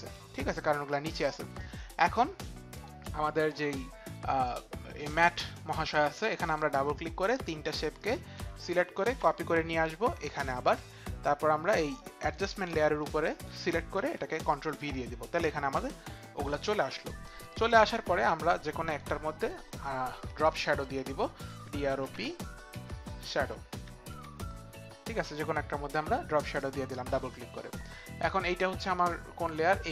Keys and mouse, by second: 2.7 click, 6.4 click, 7.2 click, 8.0 shift+click, 9.0 ctrl+c, 12.2 ctrl+c, 14.1 ctrl+v, 19.4 click, 20.4 click.